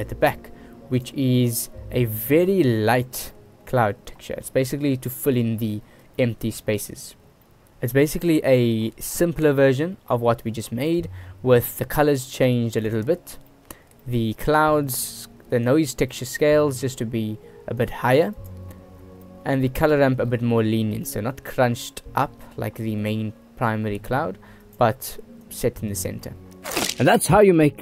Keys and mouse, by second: 1.4 middle click, 2.9-3.3 shift+middle drag, 3.8 middle click, 6.4 shift+middle click, 8.6 middle click, 11.2 middle click, 11.9 click, 12.7 click, 13.7 middle click, 14.3 middle click, 15.9 click, 18.0 click, 18.6 middle click, 19.7-21.3 middle drag, 24.9-25.7 middle drag, 26.2 click.